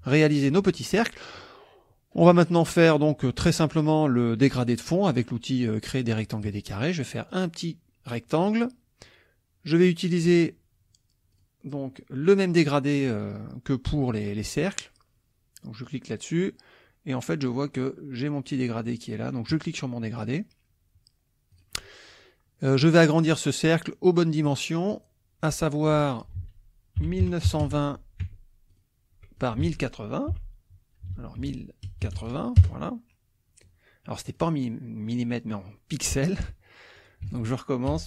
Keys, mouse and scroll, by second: 0.9 middle click, 1.1 click, 6.5 click, 7.3-8.7 drag, 11.3 click, 15.8 click, 19.5 click, 21.5 click, 24.4 click, 25.8 click, 26.4 ctrl+a, 26.8-28.1 typing, 28.3 Tab, 28.7 click, 29.4 ctrl+click, 29.6 ctrl+a, 30.4 KP_1, 31.1 ctrl+a, 31.9 ctrl+KP_0, 32.0 KP_8, 32.6 KP_Enter, 34.4-36.3 drag, 37.0 ctrl+click, 37.3 ctrl+a, 37.9 KP_1.